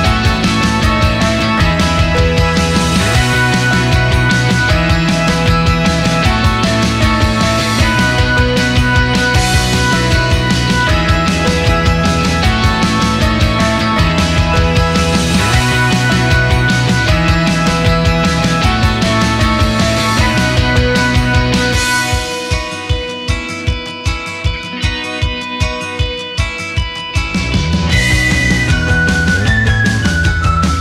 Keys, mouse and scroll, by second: 1.9 ctrl+a, 2.7 click, 3.4-3.8 scroll down 2, 4.1-4.4 scroll up 1, 4.7 click, 5.5 click, 12.9 click, 13.9 click, 15.0 click, 16.1 click, 16.8 drag, 17.2 click, 17.9-18.4 drag, 18.8-20.4 right drag, 20.7 scroll up 1, 21.3 click, 22.9 a, 24.3 click, 25.0 click, 26.3 click, 26.5-27.7 drag, 28.5 click, 29.8 click, 30.5 click.